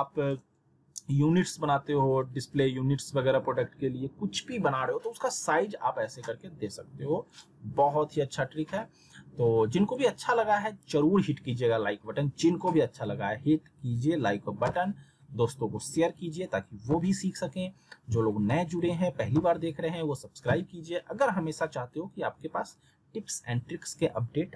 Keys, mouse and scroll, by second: 7.3 click, 9.8 click.